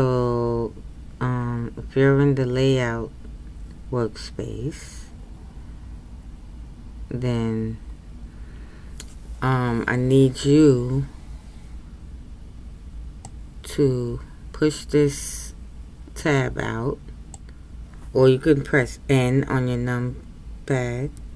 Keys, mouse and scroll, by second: 13.4-16.5 drag, 20.9 n.